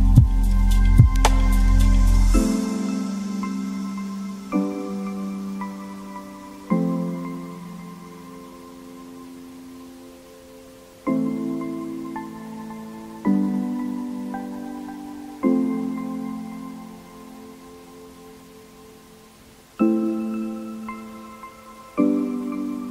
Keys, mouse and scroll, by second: 2.1 click, 2.4 KP_0, 2.6-2.9 scroll down 7, 2.9-3.3 scroll up 2, 3.3 click, 4.4 click, 4.9 KP_0, 5.4 right click, 6.2 click, 6.2 right click, 6.6-7.8 drag, 7.8-9.6 typing, 8.0 scroll up 2, 8.0 middle click, 9.1 middle click, 9.2 scroll up 1, 9.3 middle click, 9.9 shift+middle click, 10.0 scroll up 1, 10.0 middle click, 10.4 click, 10.6 right click, 10.8-11.1 scroll down 3, 10.8 middle click, 11.1 middle click, 11.8 click, 11.9 g, 12.2 g, 13.0 middle click, 13.2 s, 14.2 scroll up 3, 14.4 g, 15.1 g, 15.1 g, 15.4 r, 16.3 scroll down 2, 16.5 middle click, 16.8-17.8 drag, 17.8 shift+middle click, 17.9 scroll up 1, 17.9 middle click, 18.1 scroll down 2, 18.1 middle click, 18.2-20.9 typing, 18.7 scroll down 1, 18.7 middle click.